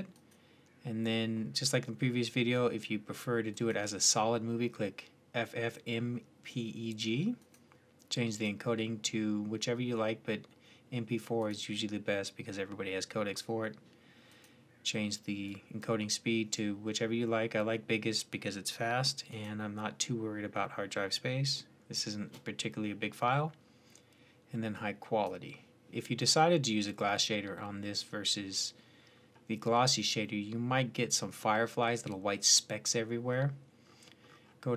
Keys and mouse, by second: 0.0-1.9 drag, 7.3-16.1 drag, 19.1-20.9 drag, 30.0-33.1 middle drag.